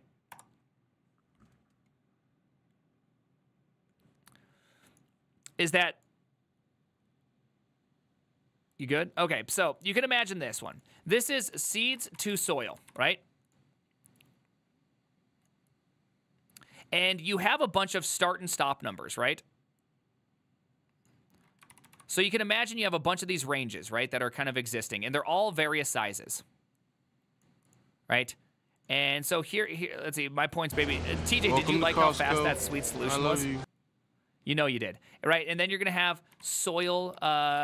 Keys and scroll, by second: 0.0-0.3 typing, 0.4 Return, 11.9-13.5 typing, 22.0 ctrl+v, 32.2 ctrl+v.